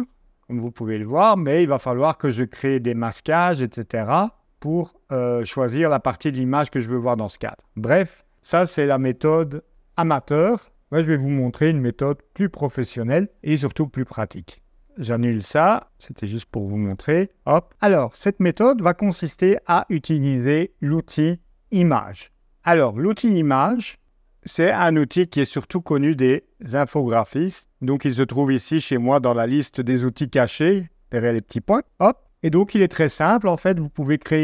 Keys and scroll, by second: 15.4 Escape, 16.8 BackSpace.